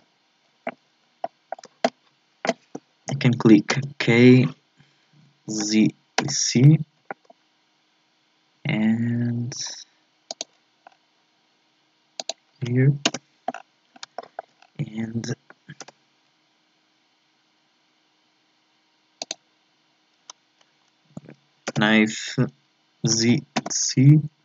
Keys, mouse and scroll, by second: 3.7 k, 10.8 scroll down 1, 13.0-13.6 scroll down 3, 13.6-14.0 scroll up 7, 14.2 shift+middle click, 14.6 scroll up 4, 15.9 k, 21.7 k.